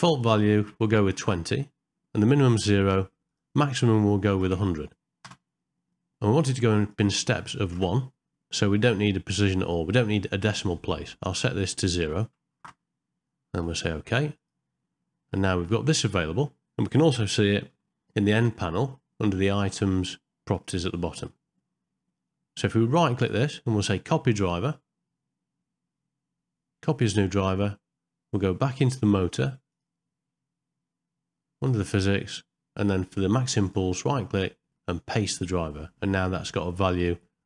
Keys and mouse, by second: 4.5 KP_0, 21.1 middle click, 23.2-27.1 right drag, 33.7-35.4 right drag.